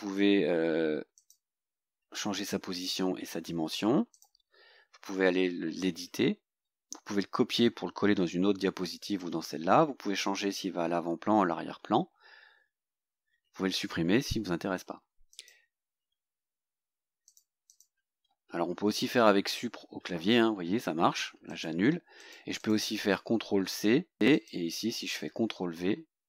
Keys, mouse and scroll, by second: 1.2 click, 4.2 click, 15.4 click, 17.3 click, 17.8 click, 19.6 Delete, 21.6 click, 22.3 click, 22.7 click, 24.2 ctrl+c, 24.4 click, 25.3 ctrl+v.